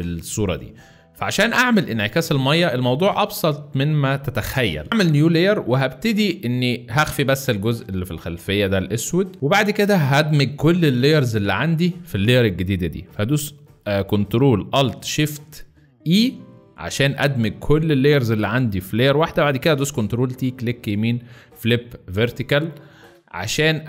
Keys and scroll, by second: 16.0 ctrl+alt+shift+e, 19.5 ctrl+t, 22.2 space.